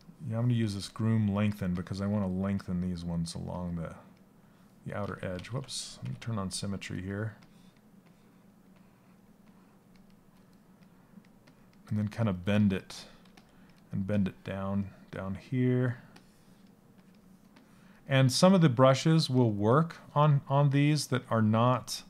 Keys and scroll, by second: 4.9 ctrl+z, 12.8 s.